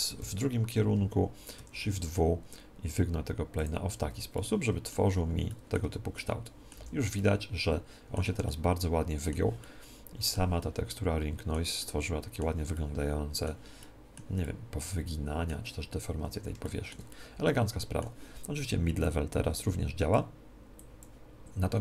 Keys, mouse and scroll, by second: 0.2 KP_3, 1.5 shift+w, 3.6-5.5 drag, 4.3 middle click, 5.0 z, 5.5-7.7 middle drag, 5.8 Tab, 6.7 z, 18.8 middle click, 19.0-21.8 drag.